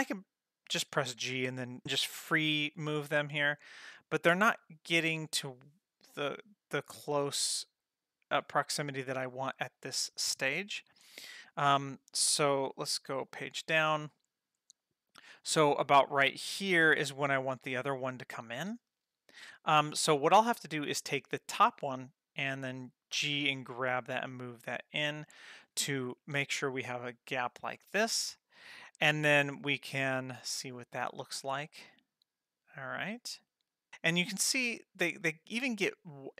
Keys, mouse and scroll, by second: 0.8 g, 13.6 Page_Down, 21.1 click, 23.1 g, 30.9-36.3 drag.